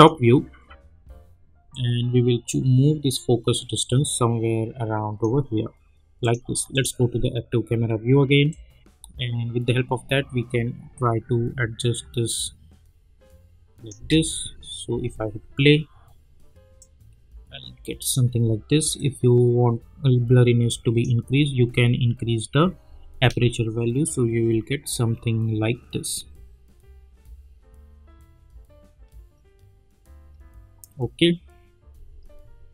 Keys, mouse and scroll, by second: 13.9 space, 16.8-21.4 drag, 21.4 space, 32.1 space.